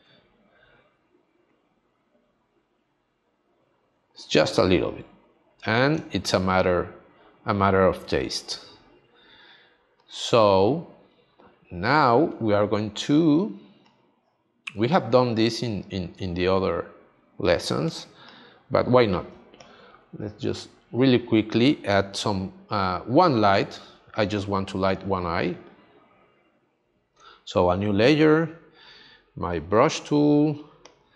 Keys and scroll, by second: 7.9 space, 13.3 space, 16.1 space, 17.8 space.